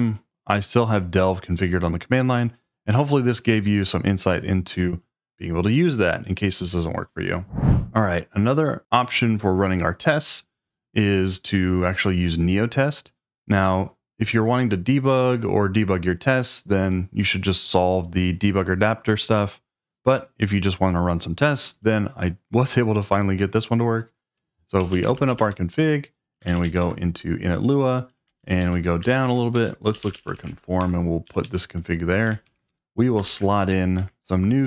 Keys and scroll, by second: 7.6-8.3 typing, 24.5-27.1 typing, 28.4 ctrl+d, 28.6 ctrl+d, 29.1 ctrl+d, 29.3-31.2 typing, 32.4-33.3 typing, 34.0 Escape.